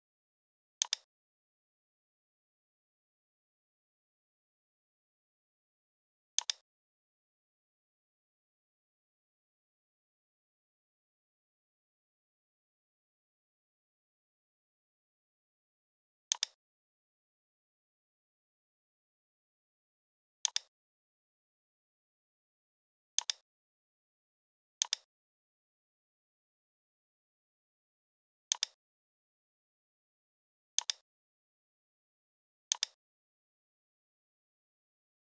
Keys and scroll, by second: 0.4 v, 2.5 r, 17.7 ctrl+d, 19.1 v.